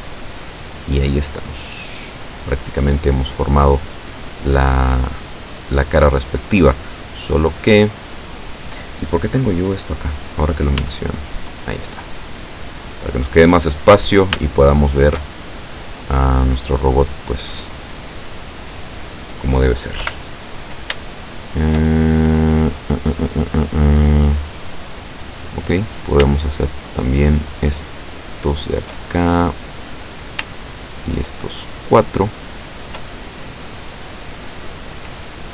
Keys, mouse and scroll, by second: 0.9-1.3 scroll down 1, 1.4-6.7 drag, 6.9 click, 10.9 n, 11.7-12.7 drag, 12.9-15.3 drag, 15.4 shift+click, 15.7-17.2 middle drag, 17.4-19.8 middle drag, 20.1 KP_7, 21.2-25.2 shift+middle drag, 25.8 right click, 27.1 shift+right click, 29.1-30.4 shift+middle drag, 30.8 shift+right click, 31.8 shift+right click, 33.1-34.9 shift+middle drag.